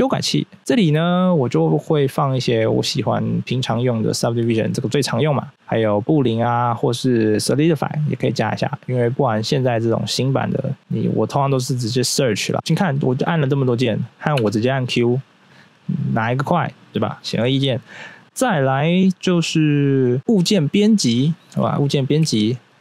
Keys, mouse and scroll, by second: 0.3 right click, 0.6 q, 8.5 click, 11.1 click, 13.7 right click, 14.3 q, 21.5 Tab, 22.2 a, 22.5-22.8 scroll up 1.